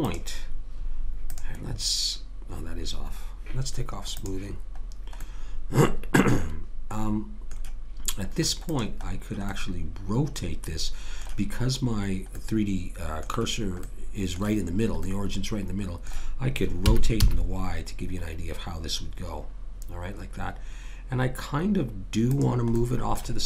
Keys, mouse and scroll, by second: 0.0-2.9 drag, 1.6-4.2 right drag, 4.2 click, 5.3-6.4 right drag, 6.4-8.7 middle drag, 8.7-9.7 right drag, 9.5 click, 10.5-12.3 middle drag, 12.5-14.0 middle drag, 16.8 r, 22.8-23.4 drag.